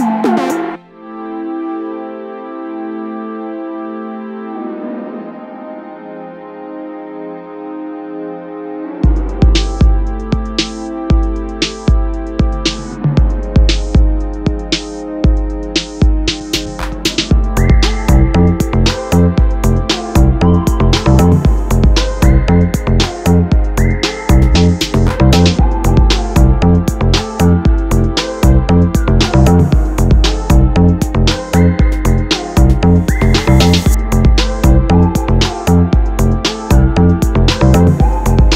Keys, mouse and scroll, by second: 1.1-3.6 drag, 5.0-6.2 drag, 7.6-11.9 drag, 15.5 click, 16.9 click, 18.4-21.0 drag, 23.5 click, 27.2-30.1 drag, 34.1-35.6 drag.